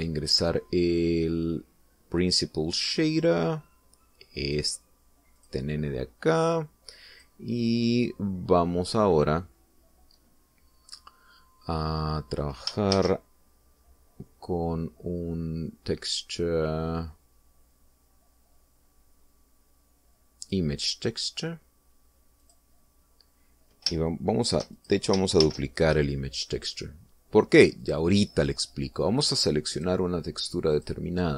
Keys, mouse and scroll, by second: 0.4 x, 0.7 shift+a, 5.7 click, 6.7 click, 7.8-8.7 drag, 8.9-10.6 middle drag, 11.2-12.0 scroll down 2, 12.2-12.5 scroll up 1, 14.3 shift+a, 21.8 click, 23.8 click, 26.1 shift+click, 26.8 shift+d, 27.9 click, 29.2 click, 31.1 click.